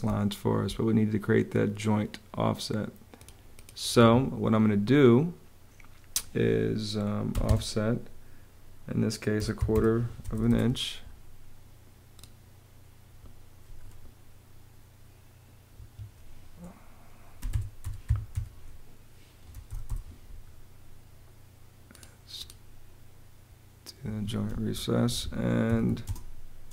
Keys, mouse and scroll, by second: 3.6 Escape, 6.9 o, 8.8-10.0 typing, 10.1 Return, 15.4 Escape, 16.8-19.3 typing, 19.5 Return, 23.7 Escape, 24.1-26.0 typing.